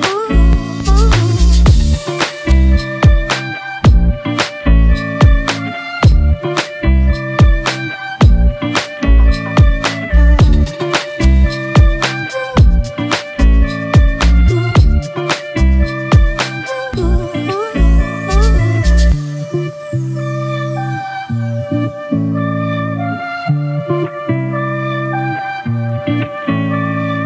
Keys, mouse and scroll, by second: 21.4-24.2 scroll down 1.